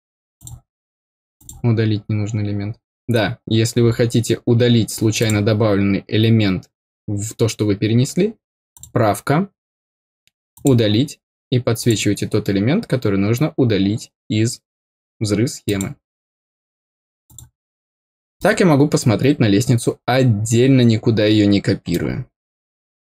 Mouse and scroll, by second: 0.3 click, 1.3 click, 5.1 click, 8.7 click, 10.5 click, 11.7 click, 15.6 click, 17.2 click, 18.3-21.9 middle drag.